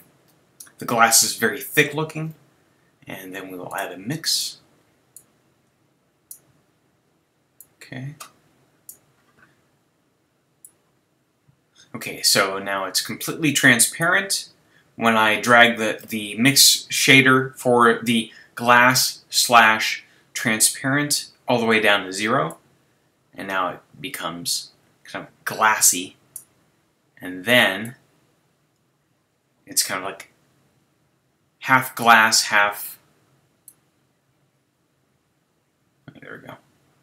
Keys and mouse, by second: 4.4-10.4 drag, 10.6-12.5 drag, 22.5-24.4 middle drag, 27.8-29.7 middle drag, 33.7 middle click.